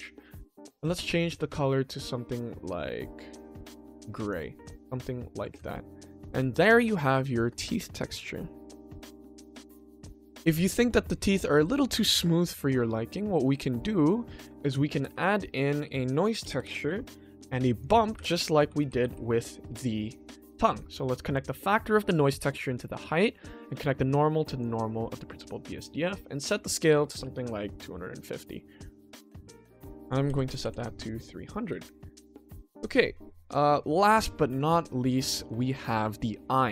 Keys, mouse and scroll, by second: 0.0 ctrl+middle click, 0.8 click, 4.2 click, 4.7-5.3 ctrl+middle drag, 5.6-6.0 shift+middle drag, 6.2 ctrl+s, 6.7-7.3 middle drag, 7.5-9.1 ctrl+middle drag, 9.3-9.7 shift+middle drag, 9.9 ctrl+s, 10.2-10.6 middle drag, 10.8 shift+middle click, 11.3 middle drag, 11.9 shift+middle drag, 12.3 ctrl+middle click, 12.8 shift+middle drag, 13.8 shift+middle drag, 14.6 ctrl+s, 15.0 shift+a, 17.9 click, 18.1 shift+a, 20.8-21.3 drag, 21.6-22.9 drag, 23.6 click, 26.3 click, 28.8 click, 29.1 ctrl+s, 29.8 click, 30.6 KP_0, 31.5 click, 31.7 ctrl+t, 32.6 middle click, 32.9-33.5 scroll down 2, 33.8-34.2 shift+middle drag, 33.8-34.2 scroll down 2, 34.5 ctrl+s, 35.0-35.5 middle drag, 35.5-36.2 scroll down 1, 36.4 middle click.